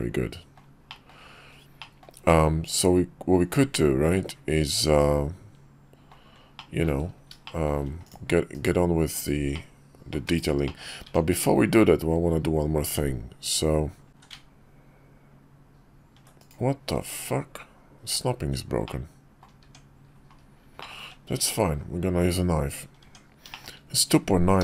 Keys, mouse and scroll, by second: 0.6 shift+middle drag, 1.5 shift+middle drag, 2.0-6.5 middle drag, 7.2 shift+middle drag, 7.8 click, 8.2 /, 8.8 /, 9.3-9.9 middle drag, 10.0 /, 10.4 middle click, 10.8 Tab, 13.8 ctrl+r, 16.7 Tab, 18.6 middle click, 20.5 Tab, 20.5 middle click, 20.7 `, 21.5 KP_5, 22.7 Tab, 23.3 shift+middle click, 24.3 d.